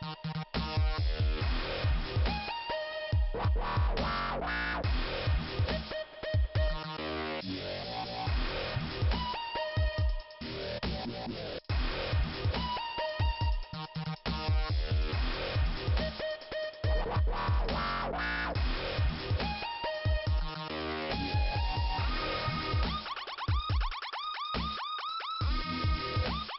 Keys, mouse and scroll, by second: 1.2 click, 4.1 shift+Return, 4.7 click, 6.0 middle click, 8.2 shift+Return, 9.0 click, 11.0 click, 11.1 click, 11.7 click, 11.8 click, 13.4 click, 16.1 click, 16.1 click, 16.7 click, 16.8 click, 17.6 click, 19.1 click, 22.4 shift+Return, 22.9 middle click, 24.1 click, 25.8 click.